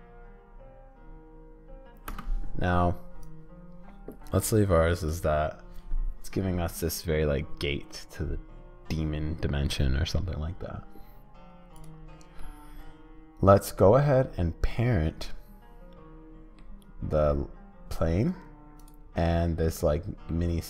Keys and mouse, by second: 2.1 space, 3.2-12.4 drag, 12.4-14.0 middle drag, 14.7-16.6 middle drag, 18.8 middle click, 19.6 middle click.